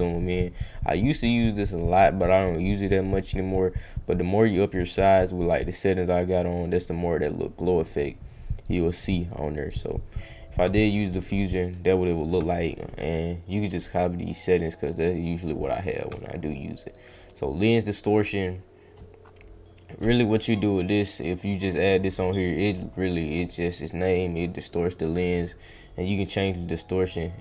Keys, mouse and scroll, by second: 0.3 scroll down 1, 3.7-4.7 drag, 5.7-6.9 drag, 7.9 click, 9.3 click, 13.6-14.8 drag, 16.8 click, 17.2 click, 17.5 click, 18.1 click, 20.2 click, 20.5 click, 21.2 click, 21.6 click, 22.0 click, 22.3 click, 24.3 click, 24.8 click, 25.8-27.4 drag.